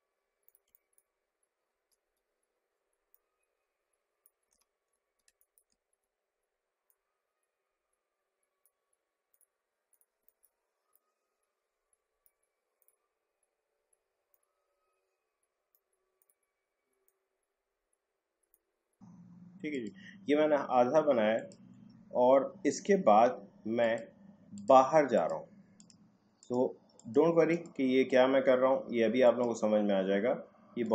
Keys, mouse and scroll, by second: 0.6 space, 0.8 click, 0.9 space, 1.9 alt+scroll down 1, 3.1-4.6 drag, 4.6 ctrl+z, 4.9-5.2 scroll down 1, 5.2 space, 5.4 click, 5.5 space, 5.8 alt+scroll up 1, 6.8-9.3 drag, 10.2 space, 10.2 click, 10.4 space, 10.9-12.8 drag, 14.3-19.7 drag, 22.9-23.2 alt+scroll down 1, 23.8 click.